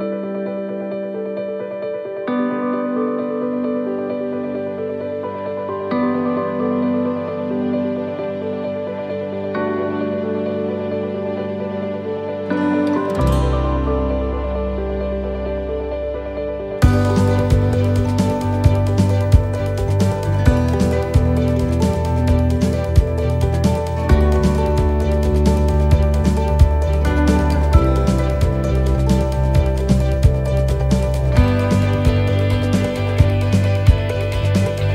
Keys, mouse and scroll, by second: 0.2 click, 8.2 click, 8.8 click, 13.7 ctrl+z, 17.3 ctrl+z, 20.0 ctrl+z, 23.2 ctrl+z, 24.9 right click, 26.0 shift+right click, 28.9 shift+right click, 30.3 shift+right click, 31.3 right click, 33.0 click, 34.4 shift+middle click.